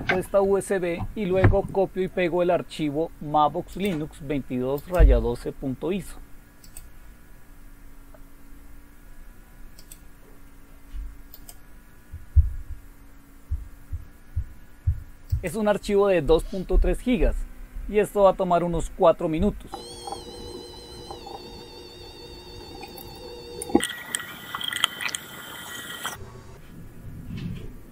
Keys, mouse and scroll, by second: 3.7 click, 4.8 right click, 6.6 click, 9.8 click, 11.3 right click, 15.3 click.